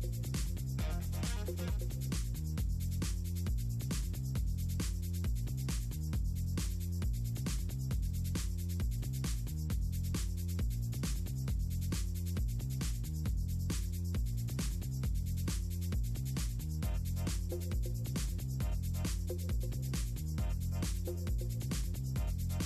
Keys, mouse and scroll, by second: 0.1 click, 0.8 ctrl+click, 1.3 click, 1.7 middle drag, 1.9 click, 2.3 ctrl+click, 3.2 ctrl+click, 5.8 ctrl+x, 7.3 Delete, 7.7 click, 9.3 ctrl+click, 10.3 ctrl+click, 11.9 click, 13.5 ctrl+click, 14.1 click, 14.3 ctrl+click, 17.3 middle click, 17.7 middle click, 18.4 middle click, 19.4 middle click, 19.6 click, 19.8 middle click, 20.3 click, 21.4 click, 22.1 middle click.